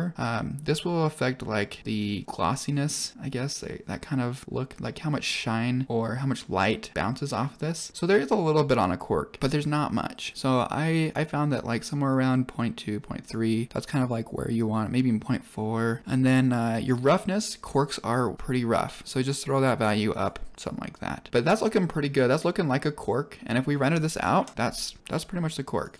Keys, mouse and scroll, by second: 6.9-10.5 drag, 12.0-13.3 drag, 15.3 click, 16.7-18.3 drag, 21.3 middle click, 21.6 scroll down 3, 21.8 middle drag, 24.6 F12.